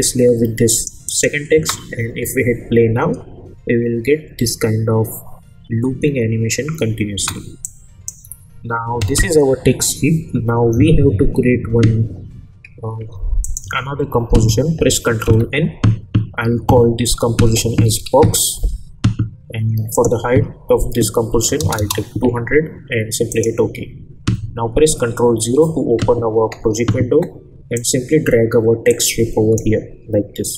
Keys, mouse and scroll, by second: 1.5 space, 7.1 space, 7.6-8.2 drag, 13.4 click, 13.6 u, 15.2 ctrl+n, 17.2-18.5 typing, 19.9 click, 23.3 click, 27.7-30.5 drag, 29.2-29.8 click.